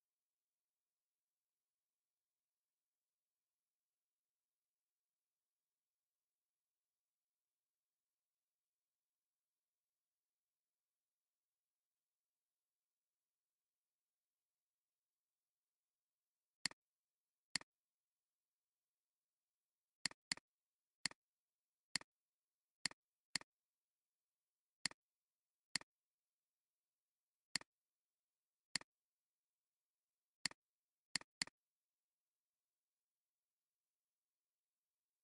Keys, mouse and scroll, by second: 1.4 ctrl+a, 11.6-14.9 typing, 20.2 double click, 25.3 alt+scroll down 1, 25.7 space, 26.2 space, 28.7 alt+click, 31.2 double click, 32.7 ctrl+a, 34.7-35.2 typing.